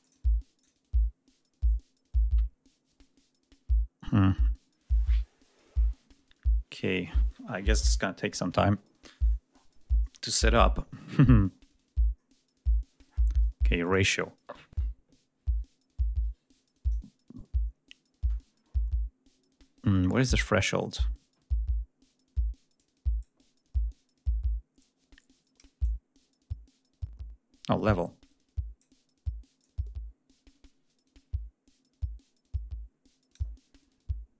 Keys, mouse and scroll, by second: 0.4 click, 13.7-14.8 drag, 22.6-23.2 drag, 24.6-25.6 drag, 25.6-28.8 drag, 29.4-33.3 drag.